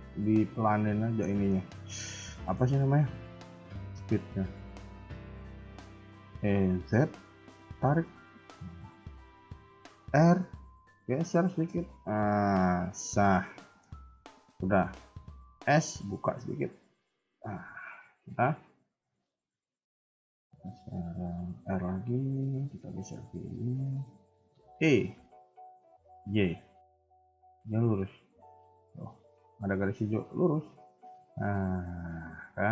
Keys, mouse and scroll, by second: 0.0 shift+middle click, 0.3-0.9 scroll up 2, 1.2 shift+middle click, 1.7-2.1 scroll up 2, 2.2 shift+middle click, 4.2 KP_1, 4.8 KP_3, 5.3 shift+middle click, 6.3 e, 10.0 r, 13.5 shift+middle click, 14.5 shift+middle click, 15.6 s, 17.4 KP_1, 17.9 KP_3, 21.5 r, 22.8 g, 24.6 e.